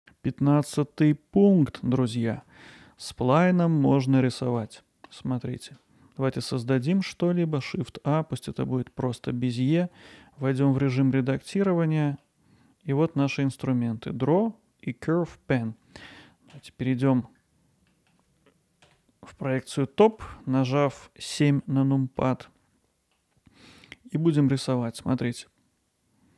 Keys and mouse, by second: 1.6 middle click, 1.9 alt+middle click, 4.7 alt+middle click, 5.4-6.4 middle drag, 6.9 shift+a, 8.9-9.3 middle drag, 9.5 middle click, 10.5 Tab, 10.9-12.2 middle drag, 16.5 KP_7, 17.9 middle click, 18.8 KP_7, 20.4 ctrl+alt+middle click, 21.4 middle click, 23.2 middle click, 24.9-26.3 drag.